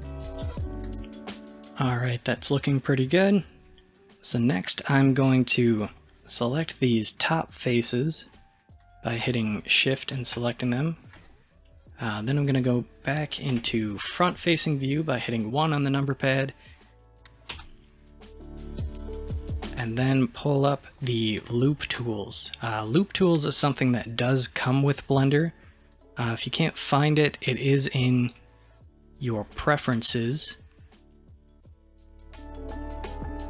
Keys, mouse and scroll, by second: 0.4 scroll down 1, 6.2 click, 7.3 click, 7.9 middle click, 8.8 shift+drag, 9.5 shift+drag, 10.1 shift+click, 10.7-13.6 middle drag, 13.6 KP_1, 15.4-16.3 scroll up 1, 16.6-16.9 scroll down 1, 17.6 n, 19.8 click, 23.0-25.9 drag, 26.9-31.0 drag.